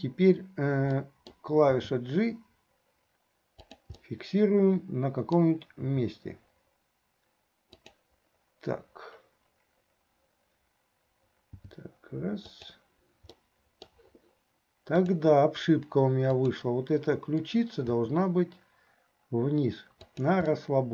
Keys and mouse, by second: 1.1 middle click, 4.1-5.7 middle drag, 13.5 middle click, 16.3 click, 17.9 r, 20.7-20.9 middle drag.